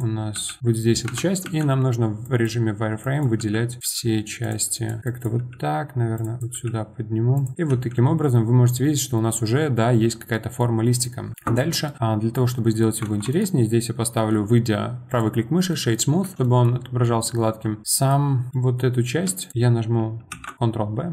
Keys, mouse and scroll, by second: 0.3 g, 1.4 z, 2.2 click, 3.0 click, 3.4 g, 3.8 click, 3.8 g, 4.7 click, 5.0 click, 5.3 g, 6.4 click, 6.5 g, 7.5 middle click, 8.2-13.0 middle drag, 13.0 Tab, 13.3-15.7 right drag, 15.7-16.2 middle drag, 16.2 Tab, 16.4-19.4 middle drag, 19.4 shift+click, 19.5 middle click, 20.3 ctrl+b.